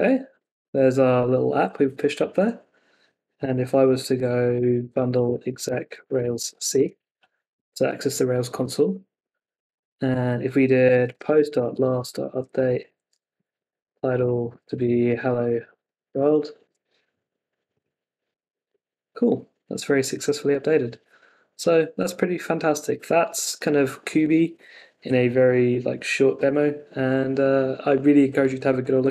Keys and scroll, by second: 0.3 Return, 4.5 super+k, 6.8 Return, 16.6 Return, 18.3 super+r.